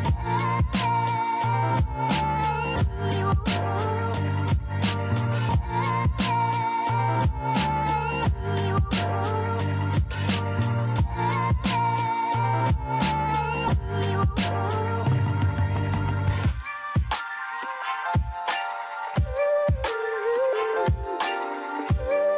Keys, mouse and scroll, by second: 0.7-1.5 scroll up 7, 1.9 click, 3.3 g, 5.5-7.0 scroll down 1, 7.0 click, 8.2 click, 9.0-11.7 drag, 11.7-12.7 scroll up 5, 13.9-14.6 scroll up 2, 14.6-17.8 shift+middle drag, 18.0-18.7 scroll down 4, 19.2 drag, 19.9-20.8 scroll up 5, 20.8-22.3 shift+middle drag.